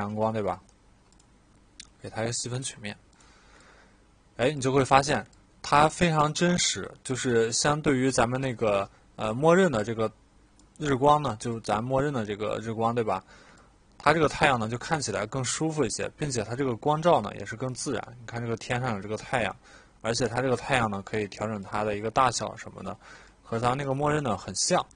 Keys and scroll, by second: 0.1 e.